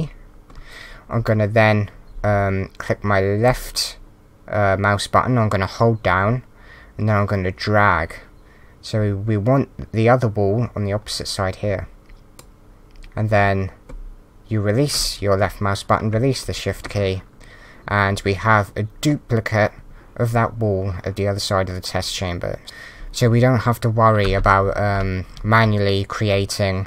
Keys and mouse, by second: 3.5 shift+click, 22.6 d, 24.4 s, 25.3 w.